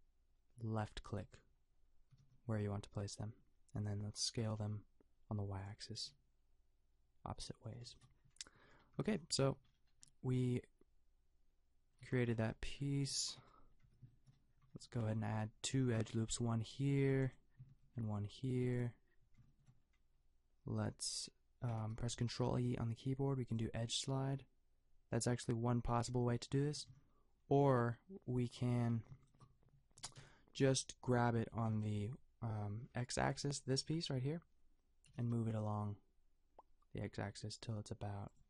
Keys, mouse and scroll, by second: 2.1 s, 8.9 a, 9.4 Tab, 12.0 a, 13.8 Tab, 14.5 a, 15.0 a, 16.2 ctrl+r, 17.9 ctrl+r, 21.9 ctrl+e, 28.3-31.6 drag, 30.0 g, 31.6 g, 35.1 g.